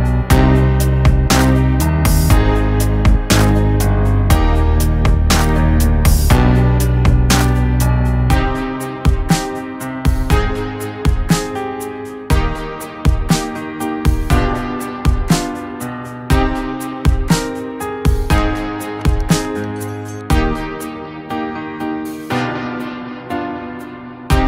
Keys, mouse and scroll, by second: 0.6 ctrl+Page_Down, 2.7 click, 9.4-17.8 drag, 18.1 click, 23.9 click.